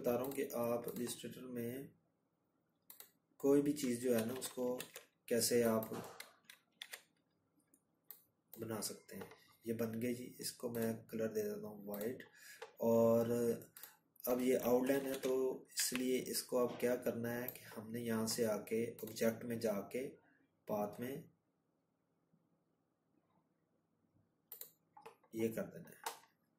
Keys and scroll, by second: 2.1 ctrl+-, 2.2 ctrl+-, 4.7 ctrl+2, 12.9 ctrl+-.